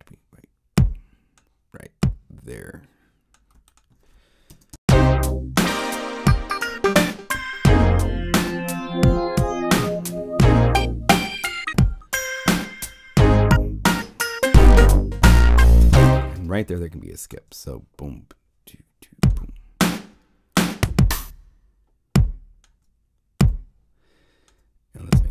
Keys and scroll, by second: 4.4 ctrl+alt+0, 4.7 Return, 16.6 alt+space.